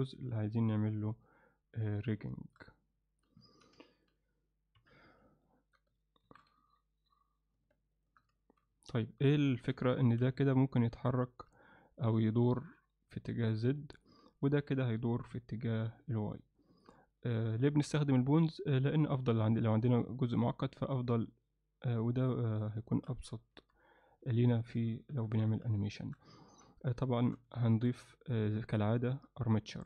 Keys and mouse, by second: 0.4-2.0 middle drag, 2.3 alt+shift+middle drag, 2.7 alt+middle click, 3.5 ctrl+middle click, 3.9 alt+shift+middle click, 4.8 KP_3, 5.5 ctrl+middle click, 6.3 shift+d, 8.4 shift+middle drag, 8.9 alt+middle click, 9.4 alt+shift+middle drag, 10.0 ctrl+middle click, 10.4 click, 11.6-12.0 alt+middle drag, 13.2-13.5 middle drag, 13.8 middle click, 14.4 click, 14.8-15.1 middle drag, 15.7-16.9 alt+middle drag, 17.1 alt+shift+middle drag, 17.6 ctrl+alt+middle click, 18.2-19.0 middle drag, 19.2 shift+middle click, 21.0-22.6 middle drag, 22.9 shift+middle click, 23.6 KP_1, 24.5 shift+middle click, 25.1 KP_3, 25.9 shift+middle drag, 26.5 ctrl+middle click, 27.2 shift+right click, 27.6 shift+a.